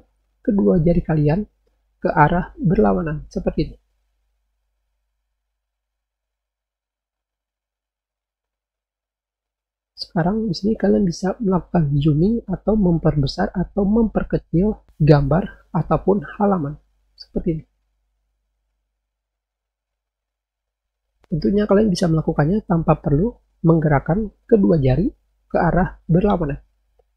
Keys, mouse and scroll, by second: 3.8-5.4 scroll up 4, 5.5 scroll down 2, 6.6-7.2 scroll down 4, 7.8-8.4 scroll down 4, 9.7 scroll down 2, 9.9 scroll up 2, 10.7 scroll down 4, 12.6-13.0 scroll up 4, 13.6 scroll up 2, 15.6-16.0 scroll down 4, 16.7 scroll down 2, 17.4-18.4 scroll down 2, 18.4-19.2 scroll up 8, 20.4-20.9 scroll down 4.